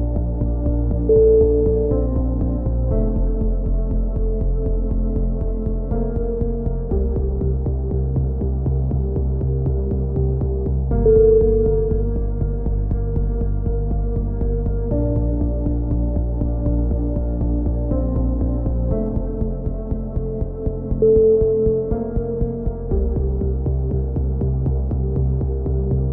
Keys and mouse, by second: 1.4-2.9 middle drag, 2.9-4.2 drag, 3.7 middle click, 4.2 right click, 4.4 e, 7.9-8.9 right drag, 8.6 f, 8.9 a, 9.1-10.4 right drag, 10.4 click, 10.5 ctrl+r, 12.4 a, 12.7 click, 13.4 middle click, 13.5 click, 14.8-16.4 drag, 16.4 middle click, 16.7 right click, 17.2 g, 22.2 a, 23.4-24.8 middle drag, 25.5 click, 25.8-26.1 right drag.